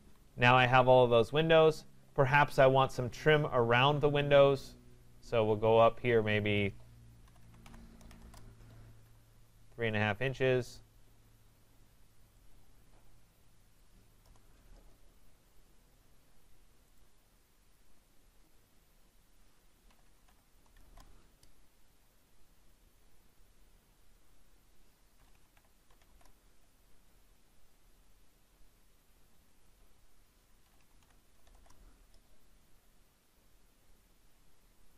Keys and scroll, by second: 8.2 Return, 14.2 Return, 20.8 Return, 26.1 Return, 31.5 Return.